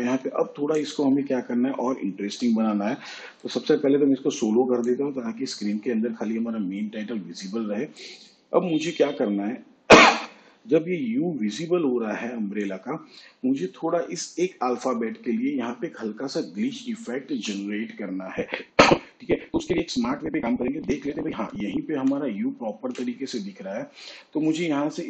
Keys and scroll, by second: 21.8 ctrl+Left, 22.6 ctrl+Right, 23.3 ctrl+Left.